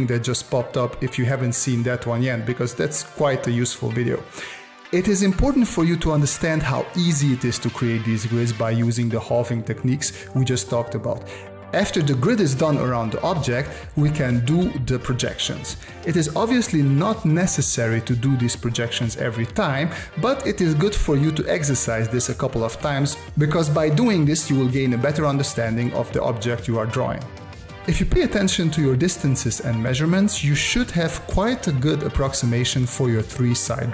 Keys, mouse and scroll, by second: 11.3 space, 12.0-13.4 drag, 13.4 space, 14.1-15.7 drag, 15.7 space, 22.4 space, 30.2 space.